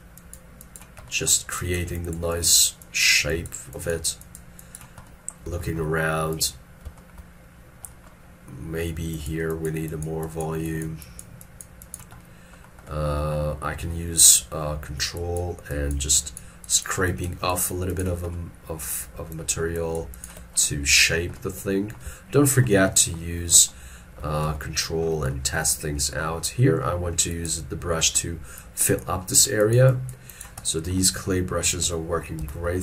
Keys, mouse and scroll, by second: 7.1 shift+middle click, 15.2 ctrl+click, 15.8 ctrl+click, 16.2 ctrl+click, 16.7 ctrl+click, 17.1 ctrl+click, 17.6 ctrl+click, 18.0 ctrl+click, 18.4 middle click, 19.4 ctrl+click, 19.8 ctrl+click, 20.2 ctrl+click, 22.4 shift+middle click, 23.7 shift+scroll down 1, 23.9 shift+middle click, 24.4 shift+scroll down 1, 26.8-27.1 scroll up 1, 32.2 scroll, 32.5 ctrl+z.